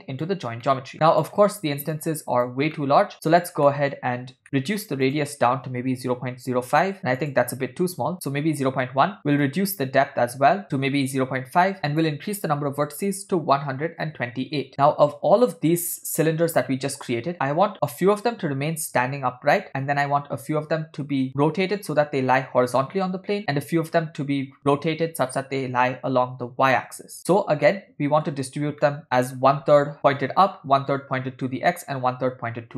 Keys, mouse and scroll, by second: 0.7 middle click, 0.9 click, 2.0 click, 2.8 middle click, 3.7 middle click, 4.4 ctrl+middle click, 5.1-6.9 drag, 7.2 click, 9.5-10.6 drag, 11.9-14.5 drag, 27.7 ctrl+middle click, 28.9 middle click.